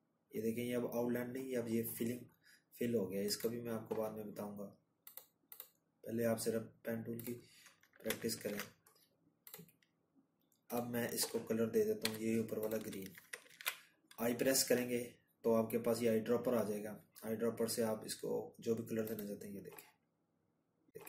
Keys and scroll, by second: 11.5 ctrl+z, 12.4 i, 19.8 ctrl+-, 19.9 ctrl+-.